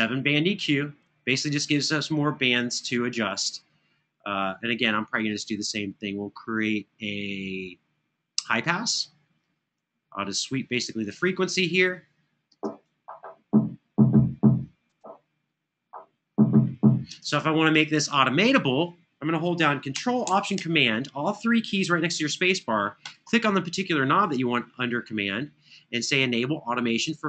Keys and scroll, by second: 12.3 space, 16.8 space.